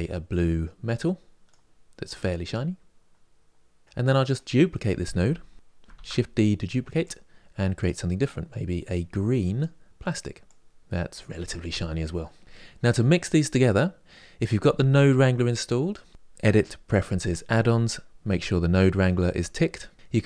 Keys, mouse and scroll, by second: 0.7-4.0 drag, 5.6 shift+d, 13.4 click.